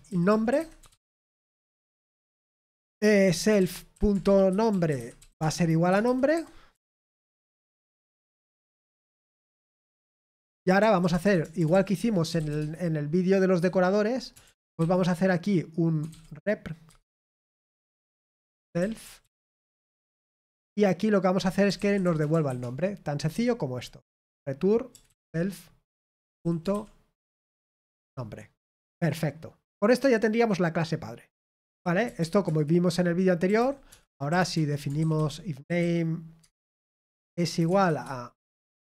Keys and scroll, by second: 0.0-2.0 typing, 4.6-12.8 typing, 11.9 Return, 17.4 typing, 19.2-20.1 typing, 20.4 Return, 22.5 typing, 24.9-26.7 typing, 28.5 Return, 28.9 Escape, 36.4 Tab, 36.4-38.3 typing.